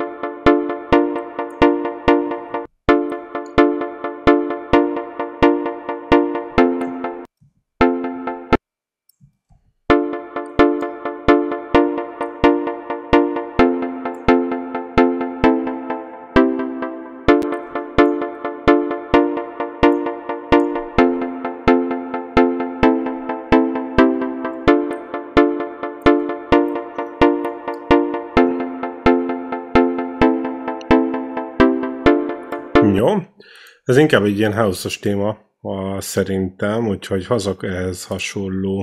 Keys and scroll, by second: 2.4 space, 7.1 ctrl+space, 7.6 space, 9.7 space, 32.8 space.